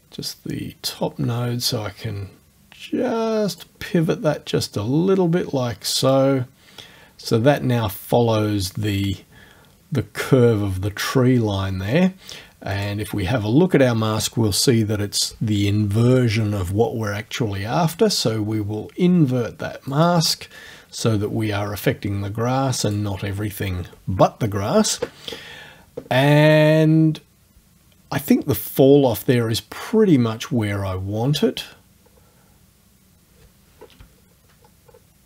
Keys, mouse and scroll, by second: 6.1 click, 12.7 click, 19.9 click, 22.9 click, 31.4 scroll up 1, 32.0-32.4 scroll down 1, 32.7 scroll up 1, 32.9-34.0 middle drag, 34.2 shift+scroll up 2, 34.6-35.1 shift+scroll down 1.